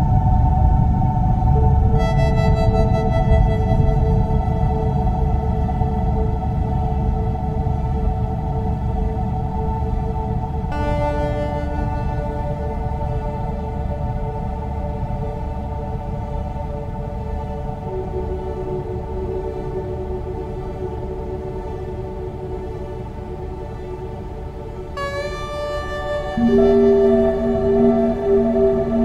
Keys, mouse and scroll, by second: 1.4 shift+middle click, 2.1 click, 3.2 click, 3.7 click, 4.0 click, 4.3 click, 4.6 click, 4.8 scroll down 8, 5.1 shift+middle click, 6.8 Tab, 7.6 Tab, 7.6 click, 7.9 Tab, 8.8 a, 9.1 a, 13.1 click, 13.8 scroll up 3, 14.1 scroll down 4, 14.4 scroll up 7, 14.7 shift+middle click, 16.8 click, 17.2 click, 20.5 click, 21.9 click, 23.6 click, 24.2 shift+d, 25.7 click, 26.2 click, 27.3 shift+d.